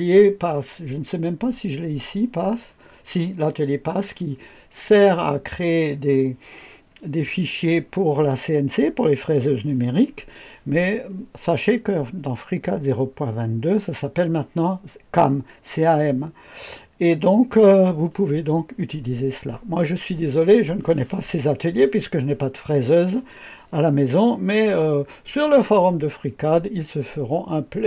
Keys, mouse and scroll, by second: 0.4 click, 4.8 click, 23.8 scroll down 2, 24.3-24.7 scroll up 1, 26.0-27.8 drag.